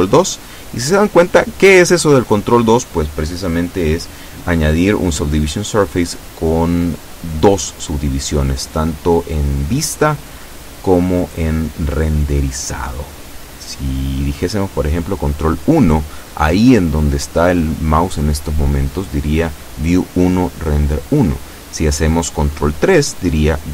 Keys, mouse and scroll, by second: 1.9 click, 3.2 click.